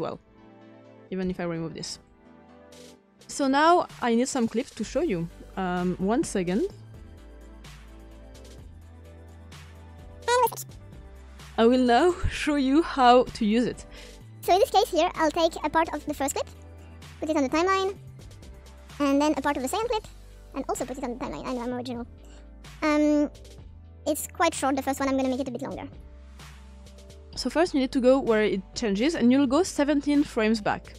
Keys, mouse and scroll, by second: 0.6-4.2 drag, 5.5-8.1 drag, 8.3 click, 8.7 click, 10.8 click.